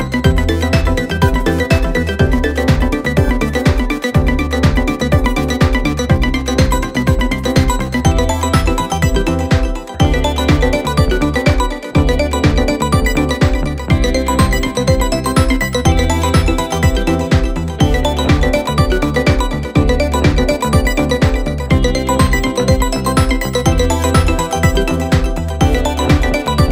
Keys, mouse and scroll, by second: 1.4-6.3 drag, 9.5 click, 9.8 right click, 13.9 click, 15.6-16.3 alt+scroll down 2, 16.3 space, 16.5-17.4 click, 16.8 space, 17.5 click, 22.4 click, 25.7 click.